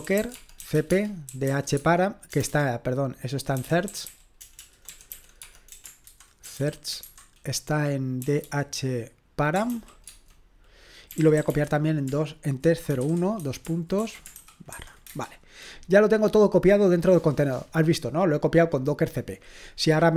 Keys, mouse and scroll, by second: 0.0-15.2 typing.